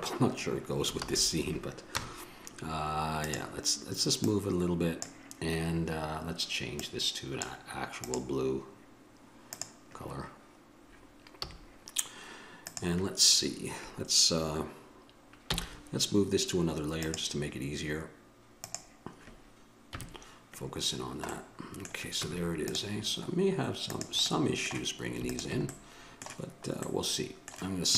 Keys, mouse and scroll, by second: 1.3 shift+z, 2.2 KP_0, 7.1-11.6 drag, 11.6 a, 15.7 m, 20.1 KP_Decimal, 21.2 middle click, 22.4 Tab, 24.1-27.9 drag.